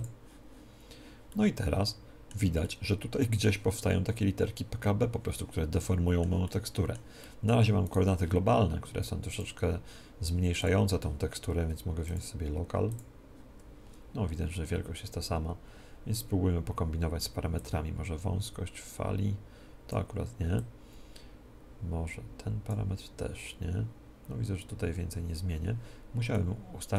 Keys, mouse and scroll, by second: 0.0-4.1 drag, 1.2-4.4 middle drag, 5.7-8.8 middle drag, 7.8-13.6 right drag, 9.3-26.3 drag, 26.3-26.9 middle drag.